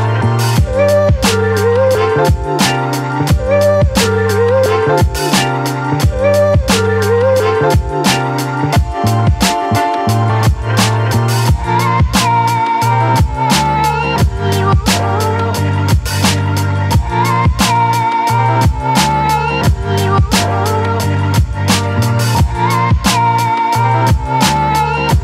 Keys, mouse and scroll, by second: 1.7-3.7 alt+drag, 4.4 space, 4.9 ctrl+click, 4.9-11.6 ctrl+drag, 11.6 ctrl+t, 12.2-17.6 drag, 18.6 space, 19.0-21.6 ctrl+drag, 21.6 space, 22.2 alt+click, 23.4 ctrl+shift+u.